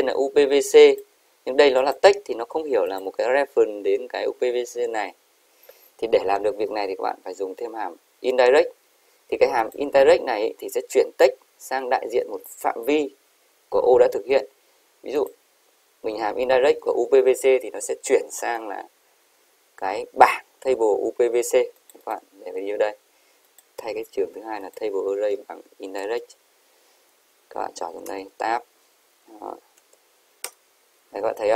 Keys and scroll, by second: 29.8 shift+0, 30.6 Return, 31.1 Up.